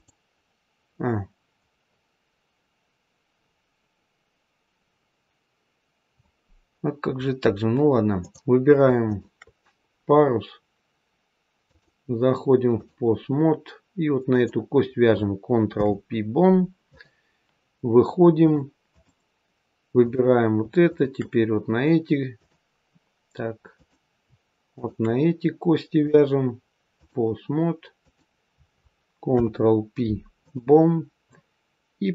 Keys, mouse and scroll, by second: 3.8-4.4 scroll up 1, 4.6-6.9 scroll down 1, 6.9-7.8 scroll down 1, 8.1 click, 9.0 shift+click, 11.6 click, 14.2 click, 15.6 ctrl+p, 18.3 click, 19.9 click, 20.8 shift+click, 22.3 click, 23.7 click, 24.6 shift+click, 25.9 click, 27.9 click, 29.2 ctrl+p, 32.0 click.